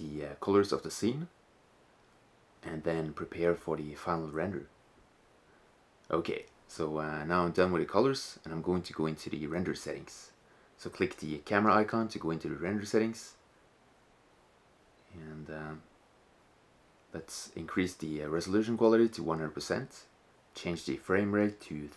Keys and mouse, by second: 0.6-1.1 drag, 3.0 right click, 3.1 click, 11.7-16.2 drag, 17.7-19.4 drag, 19.8-21.9 drag.